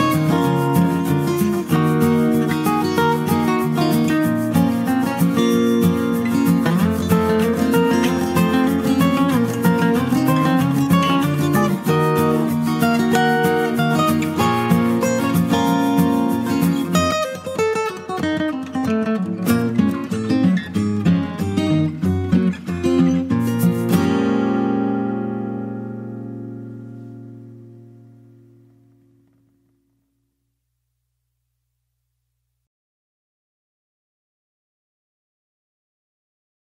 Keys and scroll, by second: 15.8 ctrl+t, 22.3 ctrl+space.